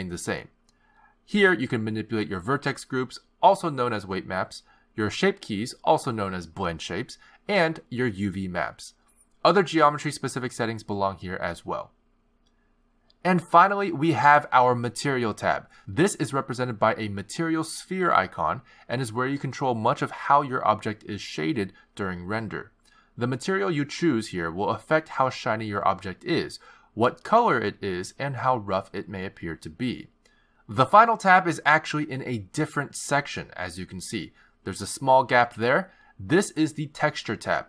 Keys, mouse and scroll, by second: 0.6 click, 1.0 x, 2.1 click, 4.2 click, 5.0 click, 6.3 click, 7.5 click, 8.8 click, 9.5 click, 15.1 click, 20.1-21.1 scroll down 12, 21.0-22.7 scroll up 14, 22.7 click, 23.7-24.4 scroll down 3, 24.8 click, 27.6-28.7 scroll down 12, 28.5-30.9 scroll up 18, 33.9 click.